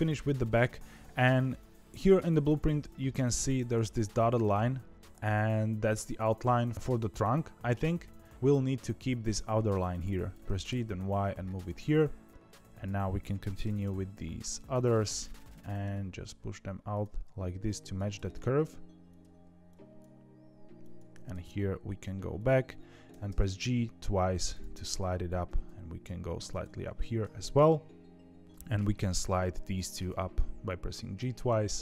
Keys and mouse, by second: 0.1 shift+middle click, 10.4 g, 12.3 click, 13.6 g, 15.6 g, 21.1 g, 23.0 g, 25.0 click, 25.4 g, 26.9 shift+middle click, 27.6 shift+middle click, 29.9 g.